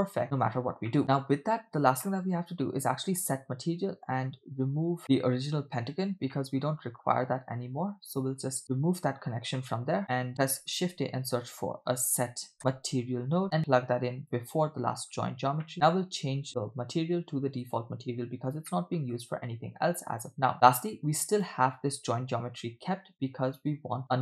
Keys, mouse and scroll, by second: 0.6 scroll down 3, 0.9 middle click, 1.7-2.0 scroll down 2, 2.1-3.4 middle drag, 4.3-4.8 scroll up 3, 4.9 scroll down 2, 5.0 middle click, 6.4-6.8 middle drag, 7.0 scroll up 2, 8.4 click, 9.4 scroll down 2, 9.6 middle click, 10.7 shift+a, 15.1-15.7 scroll up 3, 15.7 middle click, 15.9 click, 16.5-17.7 drag, 18.4-18.9 scroll down 2, 19.0 middle click, 20.3 scroll down 2, 20.5 click, 20.9 click, 24.0-24.2 scroll down 3.